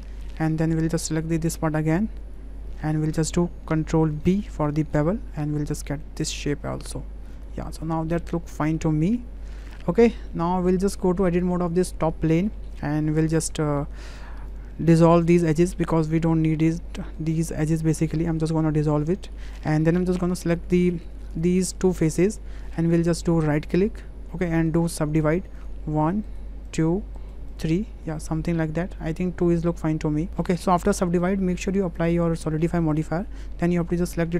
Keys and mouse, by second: 0.1-0.4 drag, 1.3 click, 2.2 click, 2.8 Tab, 4.2 ctrl+b, 7.7 click, 8.2 click, 8.8 Tab, 9.1-9.8 drag, 10.3 shift+click, 11.2 Tab, 11.5 click, 12.4 shift+click, 13.3 2, 14.1 click, 14.9 alt+shift+click, 15.3 alt+shift+click, 16.2 click, 17.2-18.5 drag, 19.0 click, 20.3 click, 21.1 3, 21.3 click, 21.6 click, 22.3 click, 22.7-23.0 drag, 23.5 click, 24.7-25.7 drag, 26.3 right click, 27.3 right click, 28.1-29.0 middle drag, 29.3 ctrl+z, 29.8-32.8 drag, 33.3 Tab, 34.1 drag.